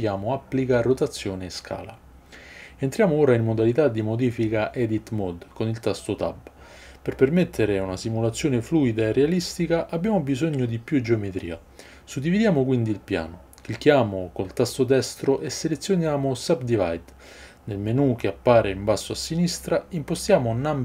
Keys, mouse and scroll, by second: 3.4 Tab, 15.6-20.8 right drag, 19.1-20.8 drag, 19.1-20.8 middle drag.